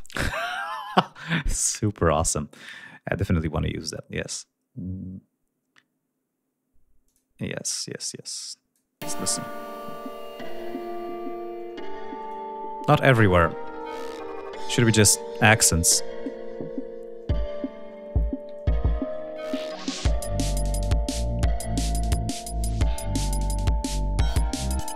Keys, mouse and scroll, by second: 4.2 click, 7.0 click, 8.2 click, 9.0 space, 9.3-9.9 scroll down 2, 10.2-10.6 scroll up 2, 12.2-13.2 drag, 14.1 ctrl+scroll down 2, 17.7 scroll down 2, 19.3 scroll down 2, 20.4 click, 21.1 ctrl+scroll up 2, 22.8 ctrl+scroll up 2, 23.3 ctrl+scroll down 2, 24.3 ctrl+scroll up 2.